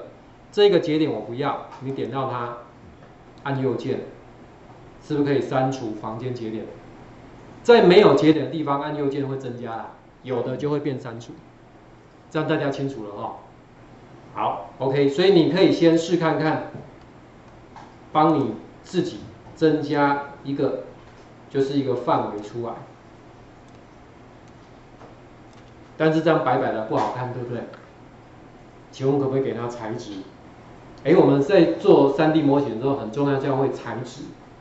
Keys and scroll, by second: 11.2 ctrl+4, 17.0 Delete.